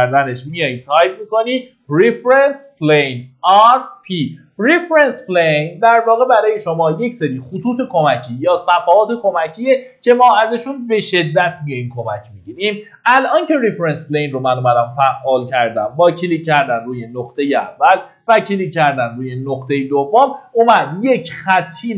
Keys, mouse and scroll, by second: 0.0-0.3 typing, 16.2 click, 20.9-21.9 scroll up 1.